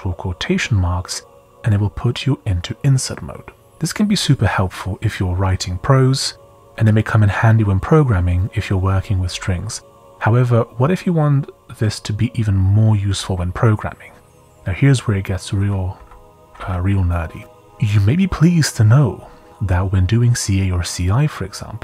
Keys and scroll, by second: 1.6 Escape, 9.3 j, 9.5 j, 14.7-16.5 typing.